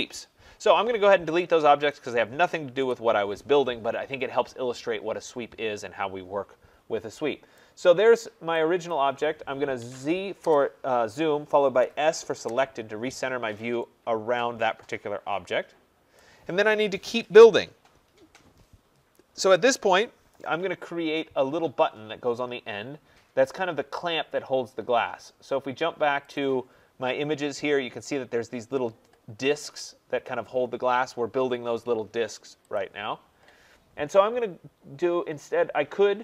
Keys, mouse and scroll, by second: 1.9 click, 2.8 Delete, 5.5-5.8 scroll, 6.4 scroll, 6.7 middle click, 7.5 right click, 7.9 middle click, 8.8 click, 9.8 z, 10.4 Return, 11.8 s, 12.4 Return, 13.3 middle click, 13.4 middle click, 16.1 right click, 21.1 right click, 26.3-31.4 drag, 32.7 click.